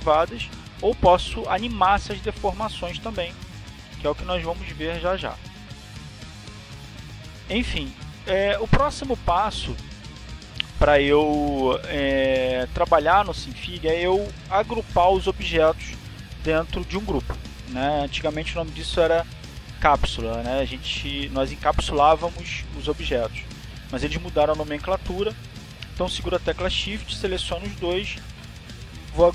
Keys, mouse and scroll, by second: 0.7 click, 1.7 click, 2.7 click, 3.8 click, 4.8 click, 6.7 ctrl+z, 8.7 ctrl+z.